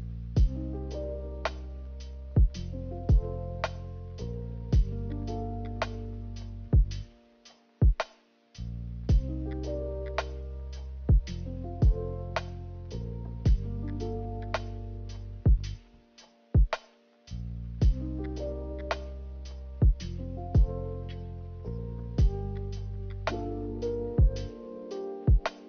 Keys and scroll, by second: 4.8 a, 16.1 Delete, 16.6 Delete, 25.6 ctrl+z.